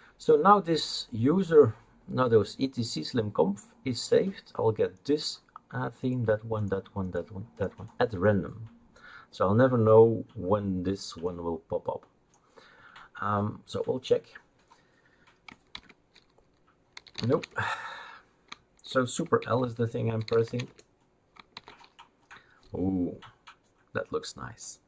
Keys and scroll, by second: 15.7 super+l, 16.7-17.8 typing, 19.4 super+l, 20.7 Return, 20.7 super+l, 21.5 super+l.